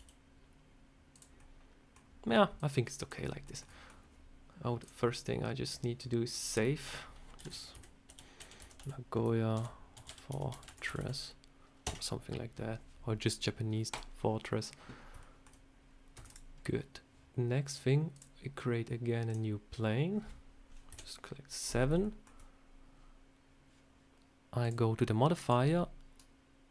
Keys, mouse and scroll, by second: 1.3 middle click, 2.5 click, 3.2 shift+scroll up 1, 3.3 shift+middle click, 3.5 middle click, 4.7 click, 14.4 click, 14.9 scroll up 2, 15.1 shift+middle click, 16.1 Tab, 16.1 click, 18.0 click, 20.8 KP_7, 21.6-22.0 scroll down 3, 21.9 shift+middle click, 24.5 click, 25.3 click.